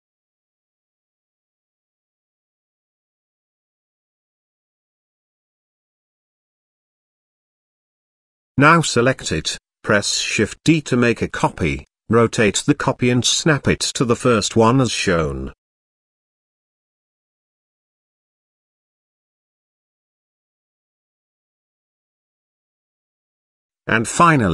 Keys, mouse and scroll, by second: 1.1 click, 1.3 click, 2.9-3.6 middle drag, 4.0-4.6 shift+middle drag, 7.0 click, 8.0 click, 8.8 click, 9.3 click, 10.2 shift+d, 12.4 r, 14.3-15.7 drag, 16.4 r, 19.0 middle click, 19.3 shift+middle click, 20.2 click, 21.0 g, 22.6 middle drag, 23.5-24.2 middle drag.